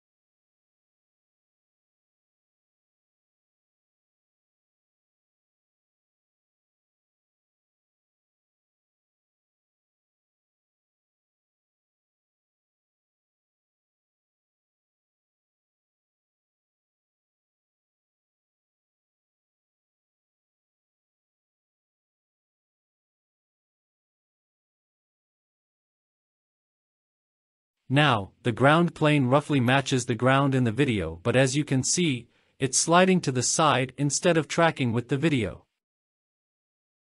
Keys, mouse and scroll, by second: 0.1 alt+z, 0.3 alt+z, 0.3 scroll down 3, 0.7 click, 1.2 KP_0, 1.7 click, 1.9 alt+z, 2.1 alt+z, 2.3 scroll down 3, 2.5 click, 2.5 scroll down 1, 3.2 scroll down 3, 3.3 ctrl+z, 3.5 click, 4.0 click, 4.2 alt+z, 4.3 middle click, 4.3 scroll down 2, 4.5 scroll up 3, 6.5 ctrl+z, 8.2 KP_0, 10.2-12.5 drag, 16.1 click, 18.4-19.4 drag, 20.0 shift+click, 21.4 shift+click, 22.4 click, 23.3-24.3 scroll down 2, 24.3-25.3 drag, 25.5-26.1 scroll up 2, 26.2 shift+middle drag, 26.7-27.4 scroll up 3, 27.6 scroll down 2, 27.8 space, 30.5 space, 32.6 click, 33.6 click, 34.5-35.6 scroll down 3, 36.2 click, 36.2-36.6 scroll down 1.